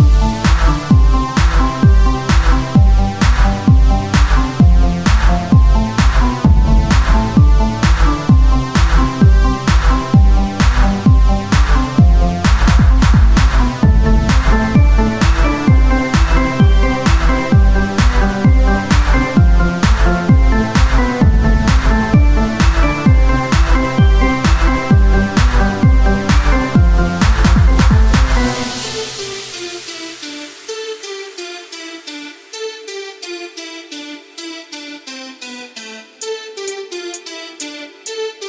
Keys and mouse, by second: 2.3-3.3 drag, 3.3 e, 4.9 s, 7.1-9.8 drag, 9.8 e, 10.7 s, 12.2-14.2 drag, 14.6-16.4 drag, 17.0-19.7 drag, 19.9 Tab, 22.7 Tab, 22.7 click, 22.9 z, 24.0 c, 24.5-26.7 drag, 24.6 z, 26.1 Tab, 27.4 Tab, 29.9 Tab, 30.5 KP_1, 31.1 Tab, 33.5 z, 33.9 click, 35.1-36.4 right drag, 35.7 z, 36.4 z, 36.4 KP_1, 37.7 s.